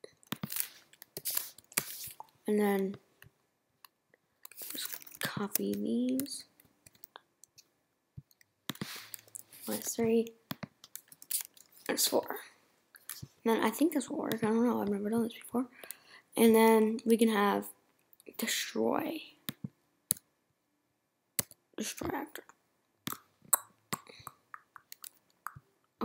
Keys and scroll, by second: 1.4 2, 9.3 Right, 11.0 Right, 13.1 4, 20.1 s, 21.4 d.